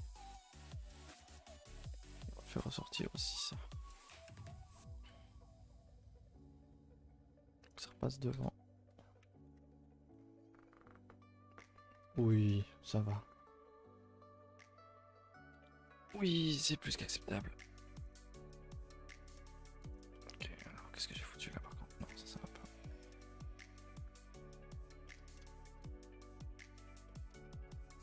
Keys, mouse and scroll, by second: 0.2 click, 0.2 g, 2.2 z, 2.8 shift+click, 3.4 z, 3.6 middle click, 3.9-4.8 scroll up 10, 4.8 g, 7.9 Tab, 8.4 KP_0, 9.3 a, 9.4 a, 10.1-11.0 scroll down 4, 12.9-13.9 shift+middle drag, 13.9-16.0 scroll up 2, 16.3 click, 16.5 shift+middle drag, 16.7-17.3 scroll up 2, 17.3 Tab, 17.5 scroll up 1, 17.6 a, 17.8 a, 18.1 click, 18.6 click, 18.7 g, 20.1 middle click, 20.4-21.1 scroll up 10, 21.2 middle click, 21.9 g, 22.8 g, 23.7 click, 24.1 g, 25.1-26.3 middle drag, 26.3 g, 27.1-27.8 middle drag, 27.8 Tab.